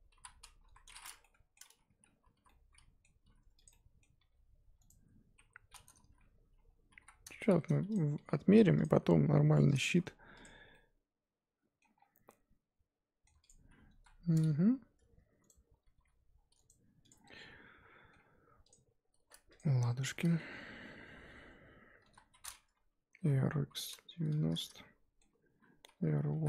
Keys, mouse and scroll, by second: 0.1 l, 0.6 KP_1, 1.2-2.3 middle drag, 2.3 l, 2.4 middle click, 3.2 r, 3.7 middle click, 4.2 g, 6.0 ctrl+z, 7.0 l, 7.4 r, 8.2 g, 8.9 r, 9.9 Tab, 10.4 click, 10.5 scroll down 2, 10.7-11.8 middle drag, 11.8 scroll up 1, 11.9 scroll down 3, 12.2-13.4 middle drag, 13.4 click, 13.5-13.9 scroll up 1, 13.9 KP_1, 14.1-14.6 scroll up 2, 14.6 r, 15.9 g, 17.1 click, 17.2 scroll down 1, 17.3 middle click, 18.2-18.7 scroll up 1, 18.7 click, 19.6 shift+click, 19.8-21.1 shift+middle drag, 21.1 ctrl+j, 22.0 KP_1, 23.0 r, 24.7-26.3 middle drag, 26.3 r.